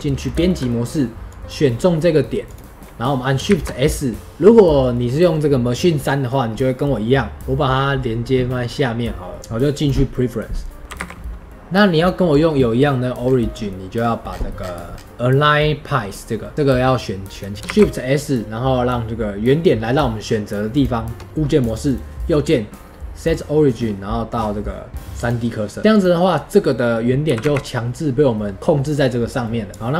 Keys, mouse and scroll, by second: 0.1 scroll down 2, 0.4 shift+middle click, 1.2 click, 2.4 click, 2.7-9.4 middle drag, 9.4-10.8 drag, 17.5 shift+s, 21.2 Tab, 21.8 right click.